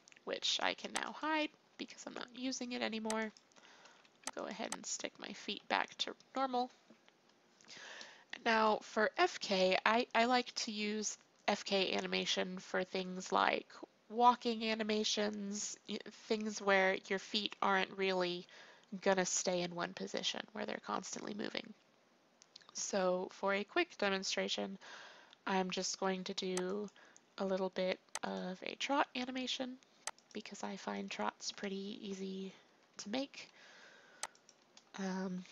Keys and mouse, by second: 1.0-3.0 drag, 3.0 middle click, 3.2 click, 3.8 alt+r, 5.2 alt+r, 6.6-7.9 middle drag, 23.1-26.6 middle drag, 26.6-28.2 drag, 28.6-30.0 drag, 32.6 i, 34.3-35.5 drag, 35.4 i.